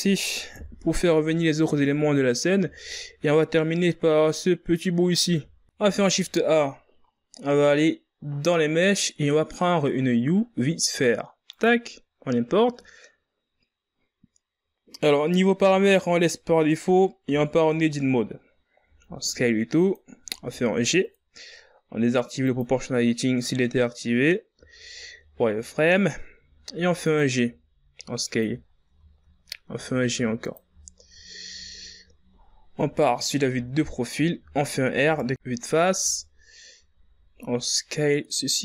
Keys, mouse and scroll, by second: 1.2 KP_1, 2.4 scroll down 5, 3.3 z, 3.8 scroll up 2, 5.9 scroll up 1, 6.0 z, 18.0 Tab, 18.6 scroll down 3, 19.6 s, 20.9 g, 23.2 click, 24.9-25.3 scroll up 6, 25.3 z, 26.1 shift+scroll up 2, 26.9 g, 28.2 s, 29.4-29.8 ctrl+scroll up 4, 29.8-30.1 shift+scroll down 3, 30.1 scroll up 2, 30.5 g, 31.5 shift+scroll up 2, 32.2 z, 33.5 KP_3, 34.6 ctrl+scroll up 3, 35.6 ctrl+scroll up 1, 35.6 r, 38.0 KP_1.